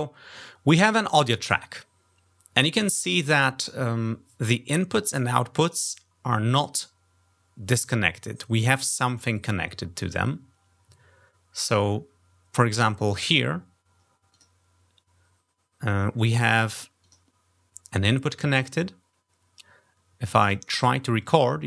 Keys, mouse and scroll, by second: 14.1 click, 16.8 click, 20.2 click, 21.1 click.